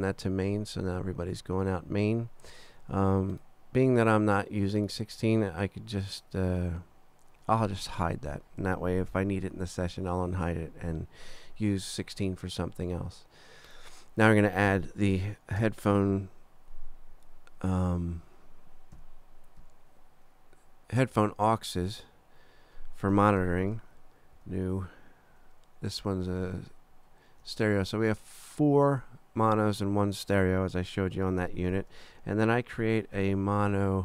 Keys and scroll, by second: 15.6 shift+super+n, 19.0 super+4, 19.6 super+4, 21.1 super+Down, 24.4 shift+super+n, 26.2 super+Right, 26.9 super+Down, 32.7 shift+super+n.